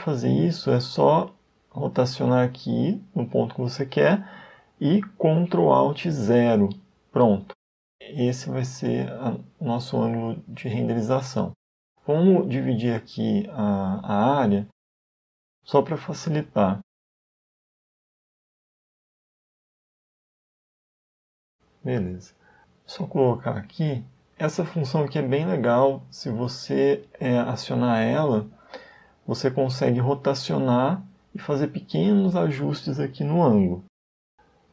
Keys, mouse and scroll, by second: 0.1 middle click, 0.1-0.9 scroll down 1, 5.3 ctrl+alt+KP_0, 10.3 right click, 16.6 middle click, 18.0 KP_1, 18.9 KP_0, 20.9 n, 22.5 click, 25.5 click, 27.9 n, 28.9 middle click, 32.2 shift+middle click, 33.4 middle click.